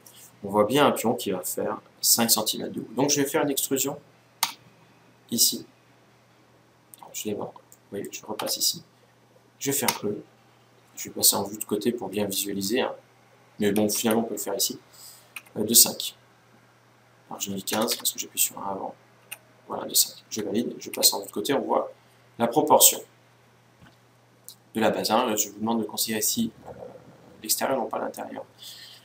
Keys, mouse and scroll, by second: 4.1 e, 7.4-9.1 middle drag, 8.1 Tab, 9.6 e, 20.6 KP_1.